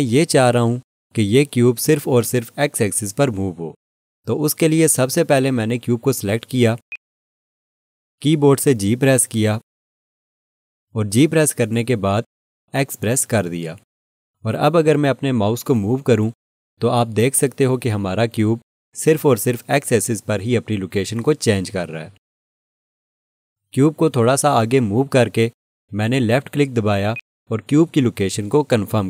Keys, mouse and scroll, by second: 6.9 click, 10.4 g, 12.6 x, 27.1 click.